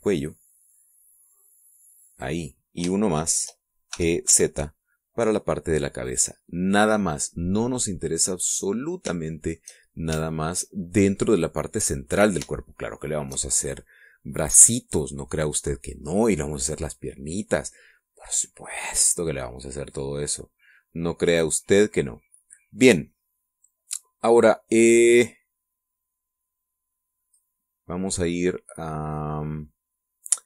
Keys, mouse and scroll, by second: 2.8 click, 3.6 shift+middle click, 4.6 shift+e, 5.0 z, 6.7 click, 7.0-8.8 middle drag, 8.9-11.4 middle drag, 11.4-11.8 shift+scroll down 2, 11.8-12.8 middle drag, 12.8-13.2 scroll down 2, 13.2-14.2 shift+middle drag, 20.6-28.2 drag.